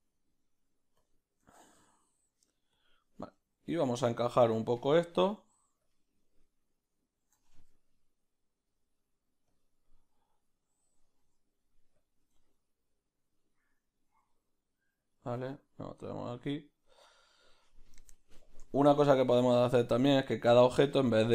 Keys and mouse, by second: 6.5 right click, 7.4 r.